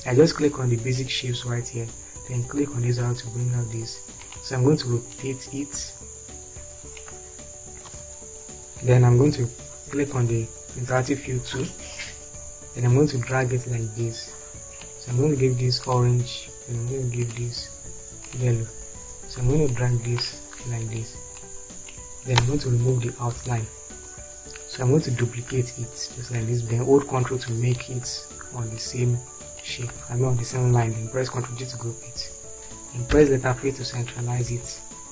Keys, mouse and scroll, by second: 8.1 space, 22.8 space, 30.7 ctrl+g, 33.3 p, 34.6 shift+F4.